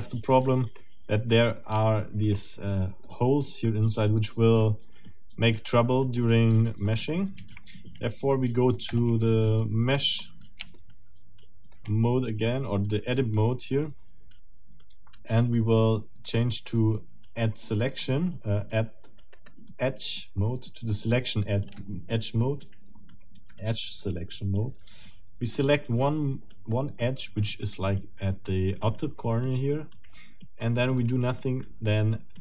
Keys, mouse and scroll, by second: 0.1-0.5 scroll up 2, 0.8 middle click, 1.8 shift+middle click, 2.4 shift+scroll up 2, 2.7 shift+middle click, 4.3 middle click, 4.9 click, 5.9-7.0 drag, 7.4 Tab, 8.7-9.8 middle drag, 9.9-10.4 scroll up 3, 10.7-11.9 shift+middle drag, 12.6 shift+middle click, 16.4 middle click, 19.4 right click, 31.0 click.